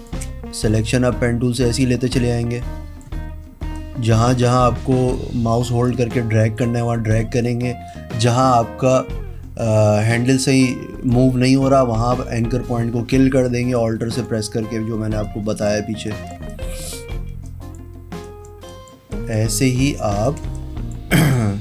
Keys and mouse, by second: 1.0 click, 3.9 click, 5.3 click, 6.0 click, 6.6 click, 6.8 space, 7.2 click, 8.0 click, 9.7 click, 10.8 click, 12.1 click, 13.9 click, 15.4 click, 16.5 space, 19.2 click, 19.8 click, 20.5 click, 20.6 space, 20.8 click.